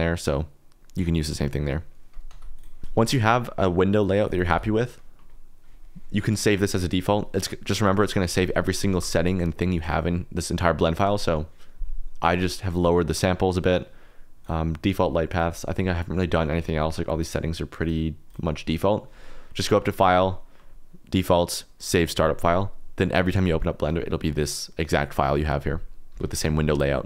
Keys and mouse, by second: 2.3 x, 2.9 x, 4.2 click, 7.9 click, 8.3 alt+g, 8.9 shift+s, 10.9 click, 12.2 click, 14.4 click, 15.3 click, 17.8 click, 18.2 click, 19.9-26.1 drag.